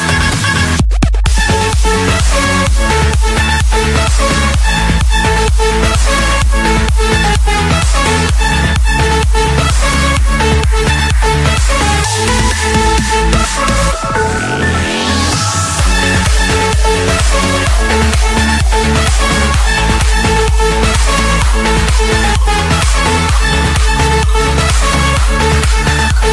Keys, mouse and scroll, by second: 0.9 click, 1.3-2.0 scroll, 2.1 click, 2.5-4.7 scroll, 9.2 click, 9.4 middle click, 11.8 click, 13.6 click, 14.7 click, 15.3 Escape, 16.8-20.0 typing, 18.6 Return, 21.9-23.0 drag, 23.1 Return, 25.5-26.3 drag.